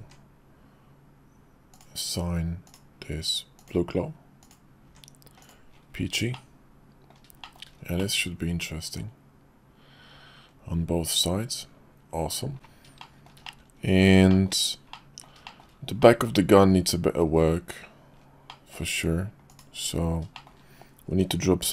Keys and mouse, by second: 0.2 Tab, 1.7 click, 2.7-3.9 drag, 4.4 click, 4.8 Tab, 5.4 click, 5.7-7.1 middle drag, 7.4 shift+middle click, 8.0-12.3 middle drag, 13.0 shift+middle click, 13.4 middle click, 14.3 shift+middle click, 14.9 middle click, 15.4 shift+middle click, 16.0 middle click, 18.5 middle click, 19.5 click, 20.3 shift+click.